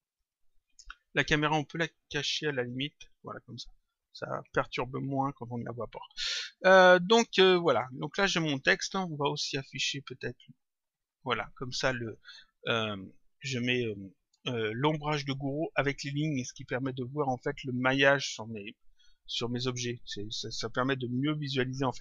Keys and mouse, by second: 0.1 click, 2.4 click, 4.3 click, 7.3 click, 9.7 click, 12.9 click, 17.4 click.